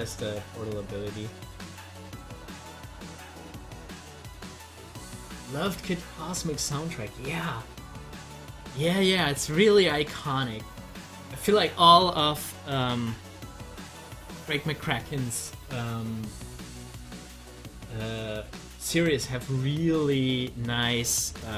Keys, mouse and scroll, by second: 2.9-7.8 drag, 7.8 scroll up 1.